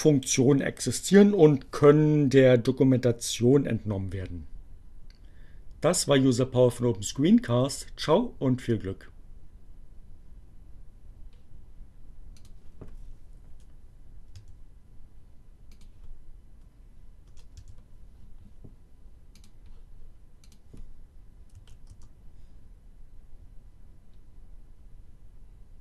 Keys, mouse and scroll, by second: 12.4 click, 13.5 Delete, 13.9 s, 15.6 click, 16.3 BackSpace, 17.5 s, 19.4 click, 20.5 click, 21.3 Up, 21.8 Return.